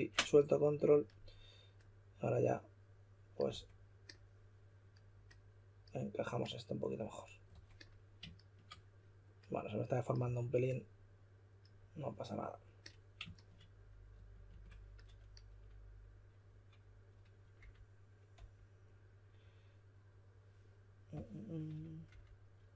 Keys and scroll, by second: 3.5 w, 7.5 typing, 10.2 w, 14.4 q, 17.3-18.3 typing, 22.0 typing.